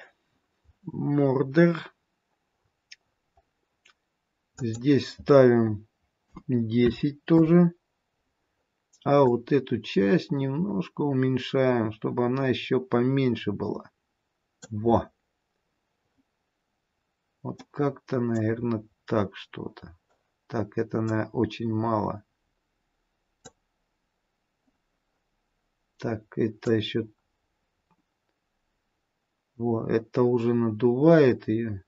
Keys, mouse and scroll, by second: 0.5-1.7 scroll down 4, 1.7-2.5 scroll down 3, 2.5-4.5 scroll down 8, 4.5 click, 4.5-5.6 scroll down 1, 9.2 click, 16.3-17.2 scroll down 2, 17.8 middle click, 18.9-19.6 scroll up 2, 21.0 click, 26.6 click.